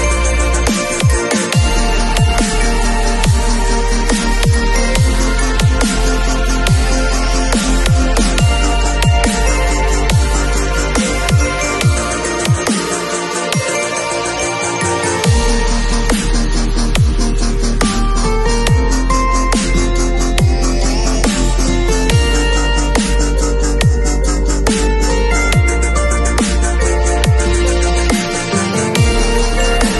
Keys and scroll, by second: 7.6 b, 10.0-11.1 typing, 23.3 v.